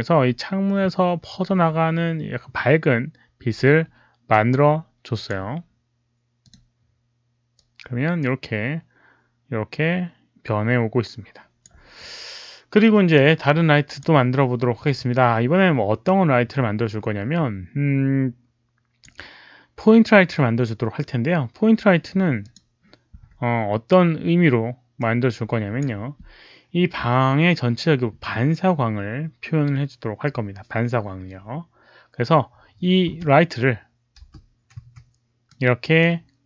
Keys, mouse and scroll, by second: 4.2-5.2 drag, 6.3 click, 7.5-11.5 drag, 13.1 click, 16.0-19.0 drag, 22.3 click, 23.1 w, 24.9 click, 31.8 click, 31.8 w, 33.1 click, 33.1-35.5 typing, 35.4-36.4 middle drag, 35.5 click.